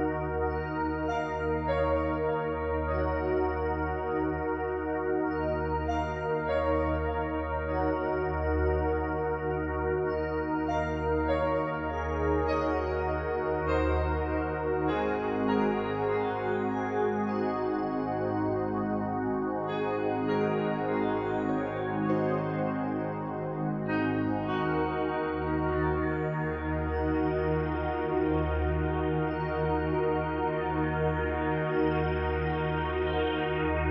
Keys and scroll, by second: 2.8 ctrl+z.